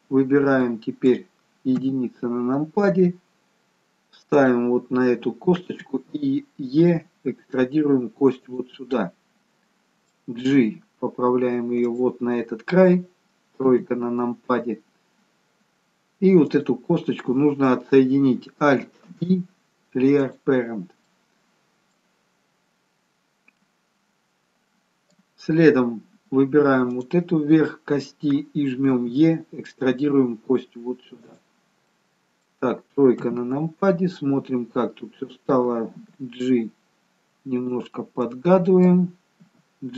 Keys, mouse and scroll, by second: 0.4-0.7 scroll up 2, 0.7 middle click, 1.8 KP_1, 3.2-3.8 scroll up 2, 4.5 click, 6.9 e, 9.0 middle click, 10.9 g, 13.7 KP_3, 15.5-16.6 scroll down 1, 16.6 click, 19.1 alt+p, 21.2 middle click, 23.5 middle click, 25.2-25.6 scroll down 1, 26.1-26.6 scroll up 1, 27.0 click, 31.8 middle click, 33.2 KP_3, 36.1 g, 38.0 middle click, 39.5 g.